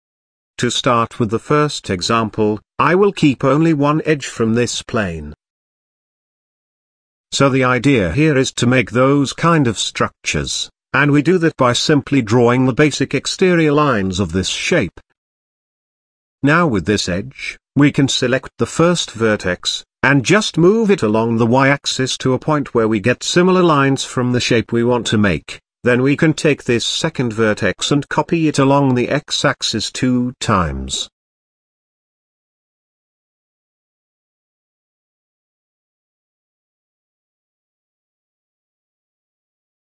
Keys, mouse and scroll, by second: 1.4 KP_7, 2.1-2.6 scroll up 5, 2.6 Tab, 4.3 z, 4.8 click, 5.6 x, 6.8 a, 7.8-10.3 shift+middle drag, 17.0 click, 19.6 g, 22.5-22.9 scroll down 2, 22.9-24.2 shift+middle drag, 24.2 click, 29.4 click, 30.0 shift+middle click, 30.9 e, 34.4 scroll down 3, 34.7 shift+middle click, 35.4 e, 38.8-39.8 shift+middle drag.